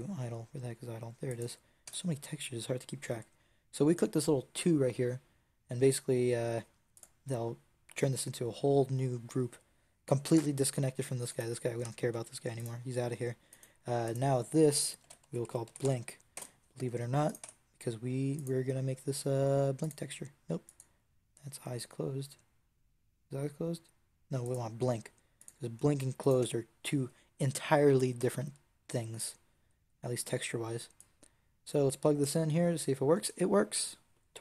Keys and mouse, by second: 1.8 Tab, 6.8-11.5 drag, 12.0 g, 15.8-17.2 middle drag, 17.2 click, 17.3 Tab, 19.6 click, 20.5 middle click, 26.3 Tab.